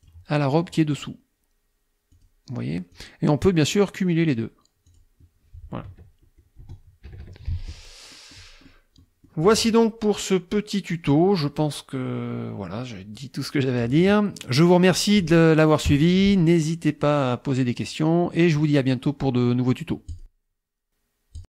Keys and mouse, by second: 2.2 click, 3.0 click, 4.2 click, 4.9 click, 5.9 KP_Subtract, 6.6 KP_Add, 7.1 KP_Subtract, 8.2 middle click, 8.6 middle click, 9.0 click, 9.8 alt+Tab, 11.2 click, 11.4 middle click, 11.6-13.4 drag, 14.0 alt+Tab, 14.6 click, 15.9 KP_Subtract, 17.5 click, 20.2 click, 21.4 click.